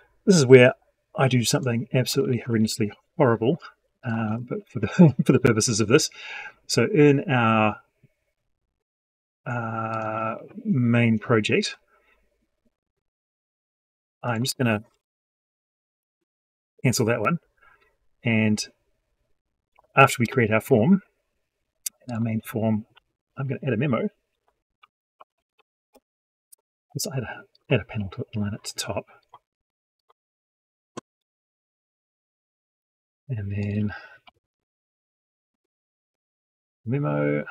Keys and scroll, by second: 4.1 ctrl+s, 22.8 F12.